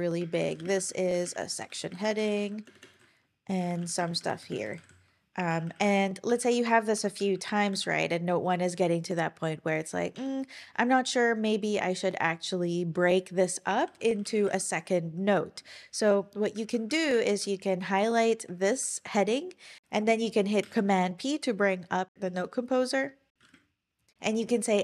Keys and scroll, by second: 0.0-1.3 typing, 3.5-4.6 typing, 5.5 shift+Page_Up, 5.6 shift+Page_Up, 5.8 shift+Page_Up, 6.9 super+c, 7.1 Page_Up, 7.7 super+v, 10.2 Return, 13.5-14.8 typing, 16.7 super+Right, 17.2 shift+super+Left, 18.6 shift+Up, 20.6 super+p, 23.4 typing.